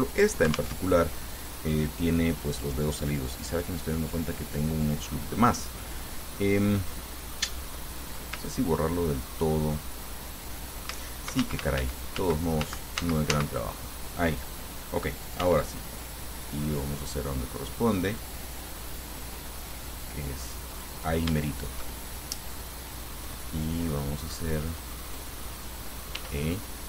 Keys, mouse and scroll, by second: 1.0 alt+Tab, 1.6 right click, 11.1 ctrl+z, 15.7 ctrl+r, 18.8 scroll up 2, 19.3 scroll up 2, 20.2 click, 21.0 click, 21.6-22.9 shift+middle drag, 24.4 click, 25.3 right click, 26.4 e.